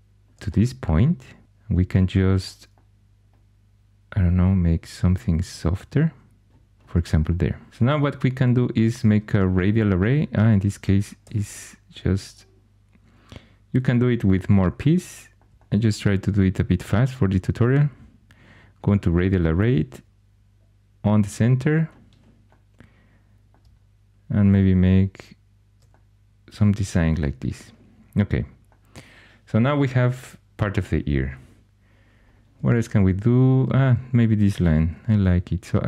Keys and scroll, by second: 1.4 2, 6.4 g, 11.2 r, 34.9 shift+a.